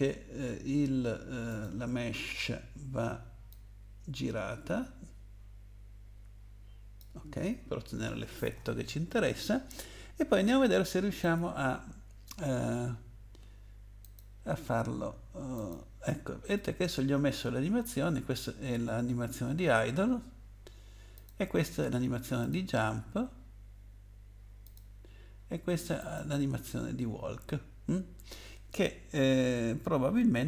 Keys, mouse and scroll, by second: 1.5 click, 3.5 click, 11.2 click, 14.0 click, 15.7 click, 21.1 click, 22.4 click, 24.6 click, 26.0 click.